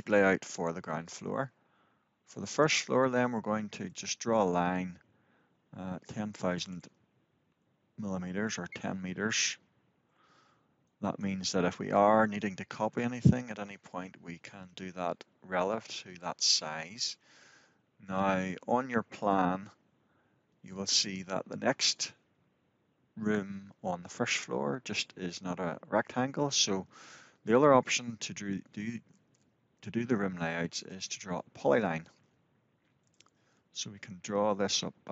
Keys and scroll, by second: 8.2 Return.